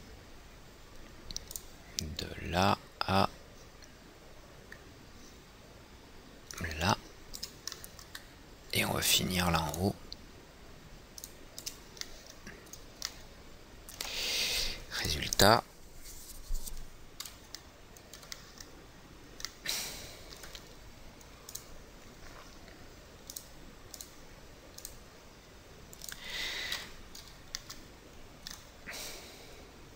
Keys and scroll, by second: 27.4 F4.